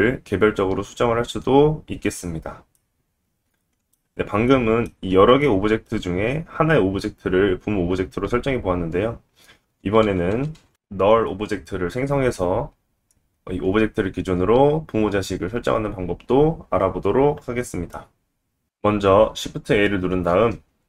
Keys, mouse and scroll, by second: 0.6 Tab, 3.1 alt+z, 3.7 scroll down 2, 4.5-11.3 middle drag, 9.6 ctrl+z, 10.0 ctrl+z, 10.5 ctrl+z, 10.7 ctrl+z, 10.9 ctrl+z, 11.1 ctrl+z, 11.3 ctrl+z, 11.8 ctrl+z, 12.0 ctrl+z, 12.2 ctrl+z, 13.0 click, 20.0 shift+a.